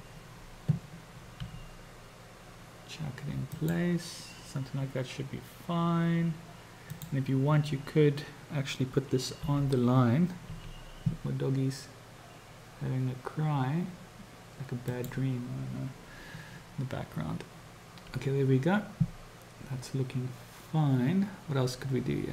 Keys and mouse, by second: 1.4 g, 6.8 click, 9.4 g.